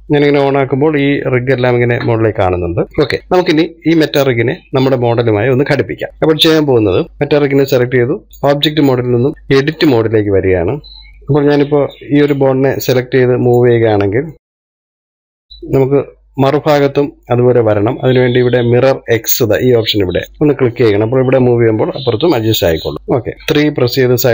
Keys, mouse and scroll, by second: 0.3-3.4 shift+middle drag, 3.4-4.5 scroll up 1, 4.5-6.1 scroll up 1, 6.1-9.3 shift+middle drag, 9.3-11.1 drag, 11.1-12.9 middle drag, 12.9 click, 14.4 click, 15.9 ctrl+z, 16.3-21.4 middle drag, 21.4 click, 22.2 click, 23.3-24.3 middle drag.